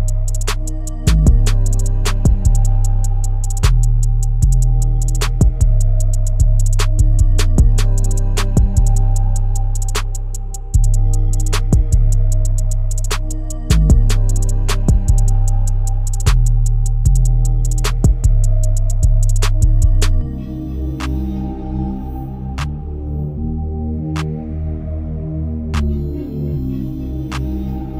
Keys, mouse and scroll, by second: 0.7 alt+click, 0.8 Tab, 1.9 alt+click, 4.0 click, 4.7 alt+click, 7.4 shift+d, 8.2 p, 8.8 Tab, 9.0 click, 9.4 click, 10.1 Tab, 10.8 Tab, 11.5 middle click, 12.4 scroll up 3, 12.7-13.2 shift+middle drag, 13.2-13.8 scroll up 3, 13.8-14.9 scroll down 2, 15.0 click, 15.9 click, 17.4-18.1 drag, 18.1-18.7 middle drag, 18.7-19.1 scroll up 3, 19.1-19.8 middle drag, 19.8-20.3 scroll down 1, 20.3-23.4 shift+middle drag, 23.7-26.0 drag, 26.0 ctrl+KP_1, 26.7-27.4 scroll down 7, 27.4 middle click.